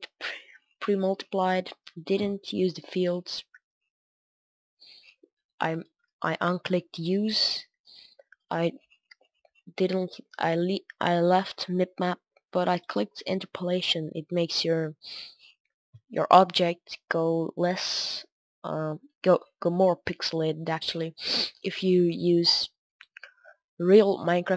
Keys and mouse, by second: 16.5-18.7 middle drag, 19.1-20.3 middle drag, 20.7 middle drag, 20.9 middle click, 21.0 drag, 21.1 middle drag, 21.5-22.6 middle drag, 23.2-24.5 middle drag.